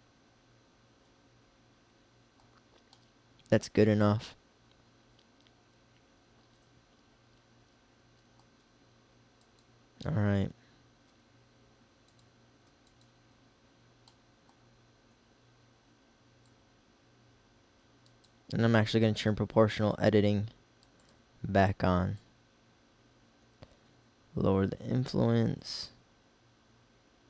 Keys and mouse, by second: 9.4-11.0 middle drag, 11.0 g, 12.3-14.4 drag, 16.5-18.4 drag, 19.2-20.8 middle drag, 22.3-24.0 middle drag.